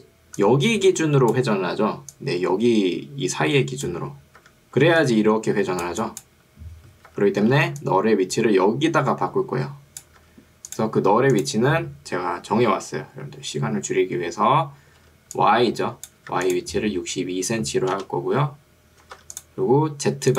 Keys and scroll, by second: 4.9 ctrl+2, 7.1 Escape, 7.7 ctrl+2, 10.3 Escape, 15.1 ctrl+2, 16.3 Escape, 17.1 5, 18.1 BackSpace, 19.1 6, 19.3 2.